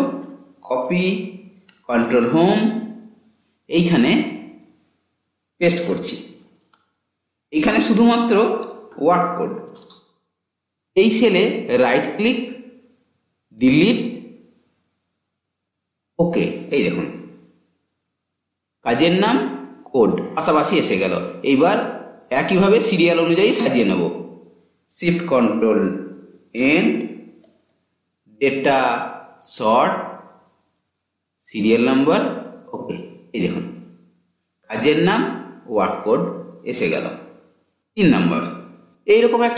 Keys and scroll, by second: 0.7 ctrl+c, 1.9 ctrl+Home, 5.6 ctrl+v, 24.8 typing, 25.1 ctrl+shift+End.